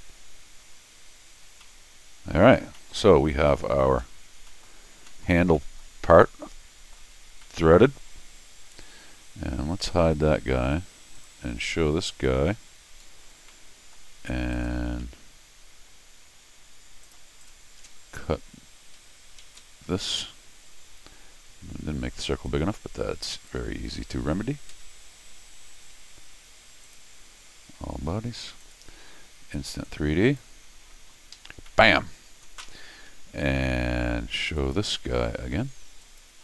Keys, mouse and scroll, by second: 1.5 scroll down 2, 1.6 middle click, 2.7 middle click, 3.4 middle click, 4.1-4.4 scroll down 2, 4.5 middle click, 4.6-4.9 scroll up 2, 5.1 middle click, 5.5 middle click, 6.1 middle click, 7.1 scroll down 1, 7.4 middle click, 9.7 Tab, 11.2 click, 12.1 click, 13.0 middle click, 13.0-13.5 scroll up 6, 13.5 middle click, 14.5 click, 15.0 c, 17.0 click, 17.4 click, 19.4 alt+x, 19.9 scroll down 2, 20.3 middle click, 22.5-23.5 drag, 26.8 click, 28.6 click, 29.8 click, 31.3 Escape, 31.7 middle click, 32.6 Escape, 34.6 click, 36.0 click.